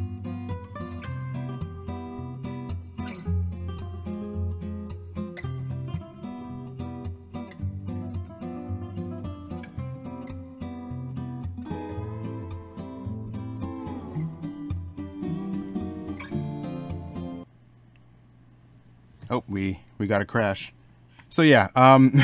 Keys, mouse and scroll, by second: 0.0 ctrl+z, 1.8-5.1 typing, 3.1 ctrl+z, 7.5 e, 8.0 ctrl+z, 15.4 ctrl+z, 15.5 middle click.